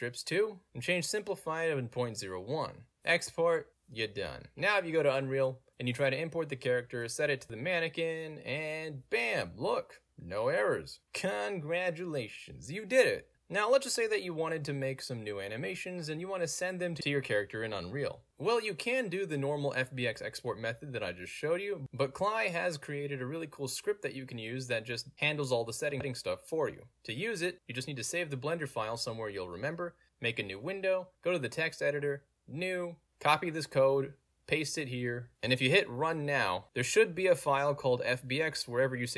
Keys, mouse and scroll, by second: 2.2 click, 3.4 click, 3.9 click, 5.1 click, 5.3-5.7 scroll down 2, 5.7 click, 5.7 click, 6.8 click, 7.1 middle click, 7.1-7.9 scroll down 1, 7.9 click, 12.0 click, 12.7-13.4 drag, 14.2 click, 16.0 w, 18.3 s, 21.9 w, 25.2-26.8 drag, 27.6 click, 28.4 click, 29.3 click, 29.8 ctrl+c, 29.9 click, 30.4 click, 31.0 click, 31.8 click, 32.6 click, 33.3 click, 33.7 ctrl+v, 34.2 scroll up 1, 36.1 middle click, 36.1 scroll up 2, 37.5 click, 37.6 click.